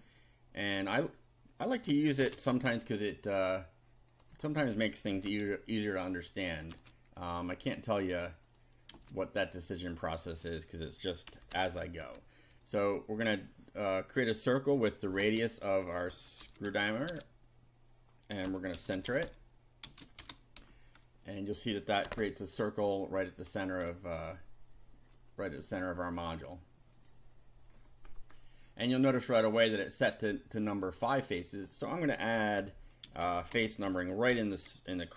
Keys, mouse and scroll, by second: 0.0-0.1 typing, 2.1 shift+9, 2.2 shift+space, 4.2 click, 5.2 ctrl+c, 5.8 ctrl+click, 6.3 ctrl+click, 6.8 ctrl+v, 8.5 click, 9.0 space, 9.4 click, 11.1-12.5 typing, 15.2-20.6 typing, 22.0 F5, 23.2 scroll up 2, 24.2-25.6 shift+drag, 26.2 click, 27.0 click, 27.7-28.5 scroll up 2, 31.3 click, 32.2 Left, 32.6-34.8 typing.